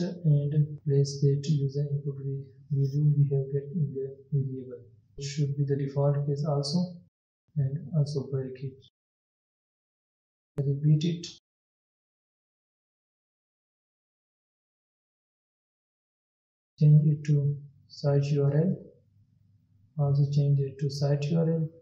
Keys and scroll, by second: 3.7 ctrl+c, 6.6 ctrl+v, 9.6 ctrl+s, 11.5 ctrl+c, 13.0 ctrl+v.